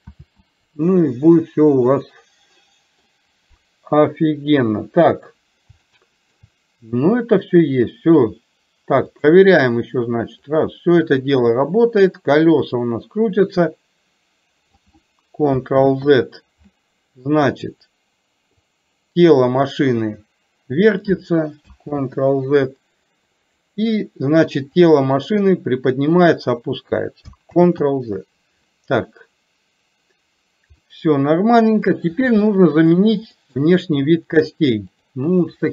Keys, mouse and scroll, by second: 0.3 ctrl+z, 1.9-3.1 middle drag, 4.6 KP_3, 5.9-6.4 shift+middle drag, 9.3 click, 10.7-14.8 drag, 15.8 ctrl+z, 17.4 click, 18.8-21.2 drag, 23.6 drag, 24.9-26.6 drag, 30.9-32.1 middle drag, 32.4-32.9 shift+middle drag, 33.4 middle click, 34.6 click.